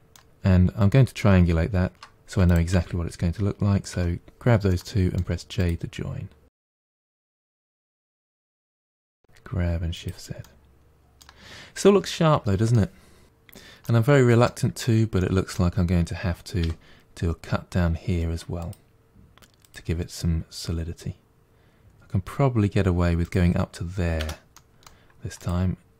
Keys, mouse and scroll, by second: 0.3-1.9 scroll up 1, 1.9 shift+middle click, 2.3 shift+click, 3.7 j, 4.5 middle click, 5.4 click, 6.4 g, 7.1 middle click, 7.5 click, 7.8 g, 10.3-11.3 middle drag, 11.3 scroll down 3, 11.6-13.2 middle drag, 13.7 middle click, 14.6-15.1 scroll up 1, 15.1-16.5 middle drag, 16.5 k, 24.4 middle click, 25.2 click.